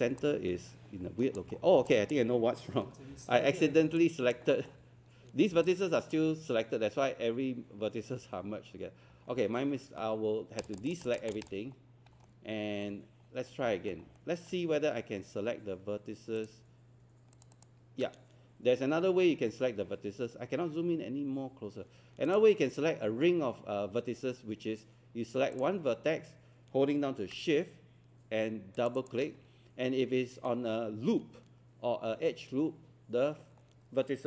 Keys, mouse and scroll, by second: 0.2 alt+click, 1.6 scroll down 1, 1.9 alt+click, 3.1 z, 3.7 scroll down 1, 4.0 alt+click, 4.5 alt+middle click, 5.4 scroll up 1, 5.7 alt+click, 8.7-9.1 scroll up 1, 10.6 click, 11.7-12.3 scroll up 2, 12.9 scroll up 1, 13.8 alt+middle click, 13.9 scroll down 1, 14.2 alt+middle click, 14.6 scroll up 1, 16.4 click, 17.3 shift+click, 17.5 shift+click, 19.8 scroll up 1, 20.0 scroll down 1, 20.3-20.6 scroll up 1, 22.3 click, 28.8 shift+click.